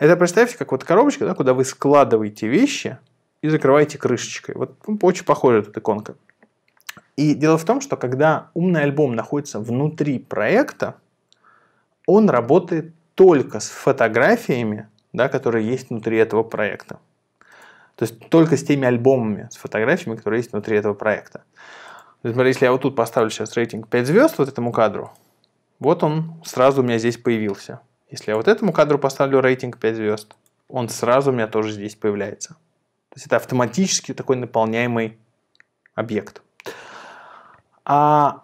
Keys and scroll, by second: 23.7 5, 29.0 5.